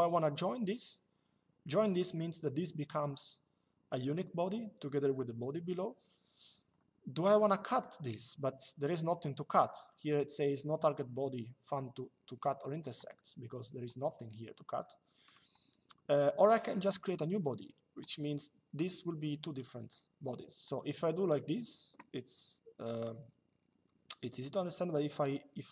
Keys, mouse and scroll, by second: 7.5 click, 14.9 click, 16.2 click, 22.7 click.